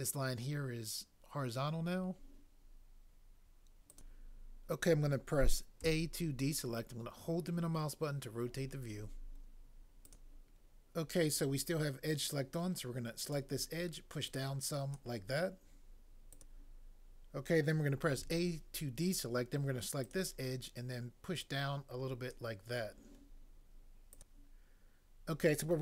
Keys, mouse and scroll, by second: 5.9 a, 18.2 a, 24.1 click.